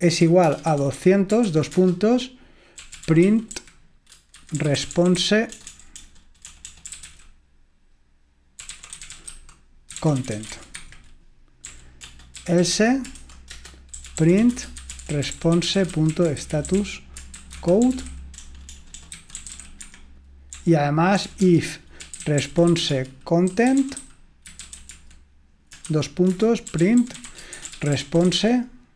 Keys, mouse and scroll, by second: 0.0-28.9 typing.